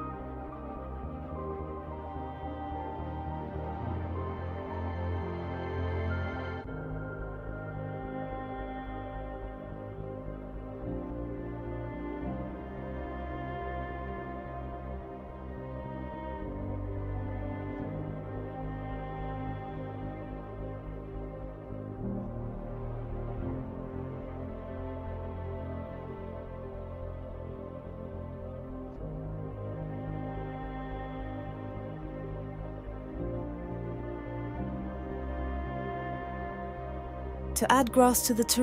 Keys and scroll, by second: 5.5-8.5 typing, 10.4 t, 16.7-17.8 typing, 29.0-32.3 typing, 35.9-37.6 typing.